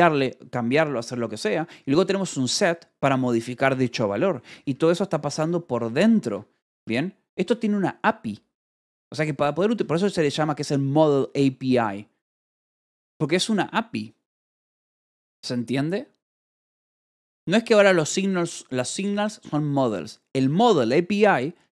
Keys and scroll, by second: 1.3 Escape, 1.7 j, 2.5 shift+v, 2.9 j, 4.1 Escape, 5.1 j, 5.6 k, 6.1 Escape, 6.7 k, 7.8 shift+v, 8.7 Escape, 9.1 l, 9.6 v, 10.2 Escape, 20.5 b.